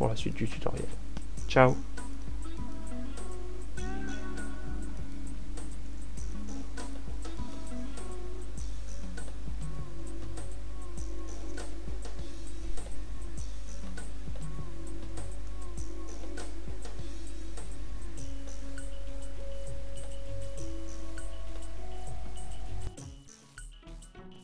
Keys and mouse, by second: 0.2 f, 1.6 a, 7.9 ctrl+alt+q, 10.4 z, 13.4 ctrl+alt+q, 17.0 z, 21.1 z.